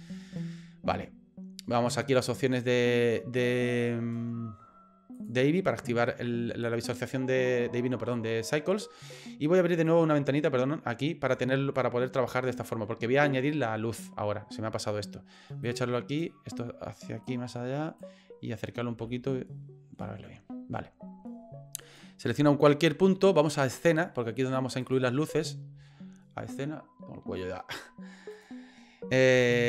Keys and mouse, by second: 5.9 click, 9.8-11.4 drag, 11.7-12.9 middle drag, 13.4 middle click, 15.6 click, 17.3 click, 19.1 ctrl+middle click, 21.8 right click, 23.8 click, 28.3 click.